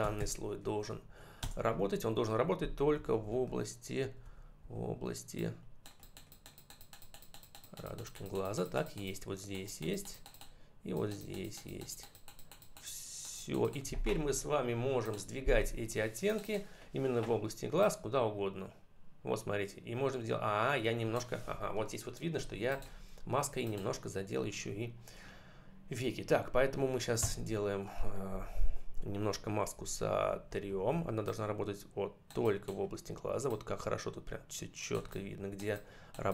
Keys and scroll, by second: 1.3 Return, 2.9 ], 27.0 x, 29.6 [.